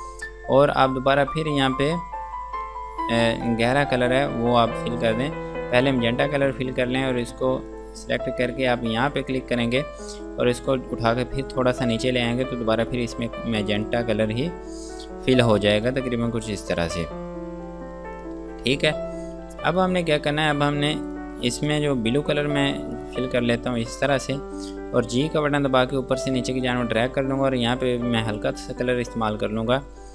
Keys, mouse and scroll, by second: 2.1 click, 6.8 click, 18.0 space, 18.4 click, 19.5 F2, 20.0 click, 22.4 z, 23.2 click, 25.1 g, 25.8 click.